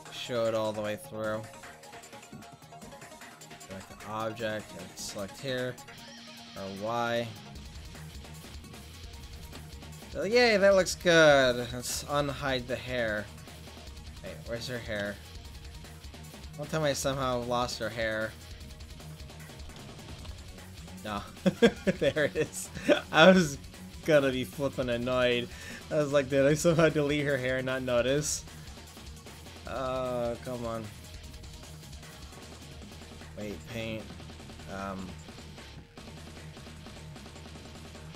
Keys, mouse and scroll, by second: 1.2-2.7 drag, 3.5 click, 4.4 right click, 6.2 r, 6.5 r, 11.9 alt+h, 14.2-19.6 drag, 20.3 alt+h, 23.7-29.6 drag, 29.8 click, 32.8 click, 33.1-34.6 drag, 34.8-38.1 drag.